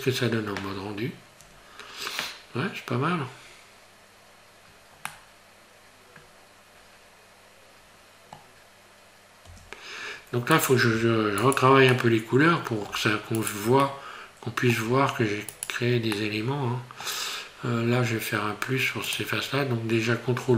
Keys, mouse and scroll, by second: 3.5 scroll down 2, 5.3 middle click, 9.6 Tab, 10.6 right click, 11.5 shift+right click, 11.9 middle click, 13.6 shift+right click, 13.9 middle click, 15.7 shift+right click, 16.2 middle click, 19.1 click.